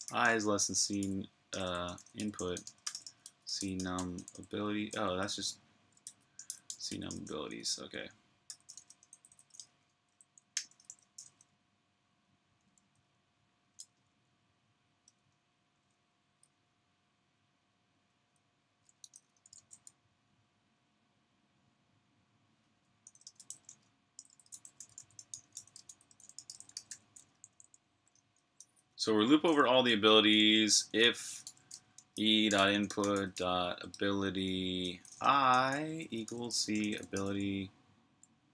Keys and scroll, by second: 0.5-1.3 typing, 12.5 typing, 13.6 typing, 14.7-15.5 typing, 18.1-19.6 typing, 22.7-26.9 typing.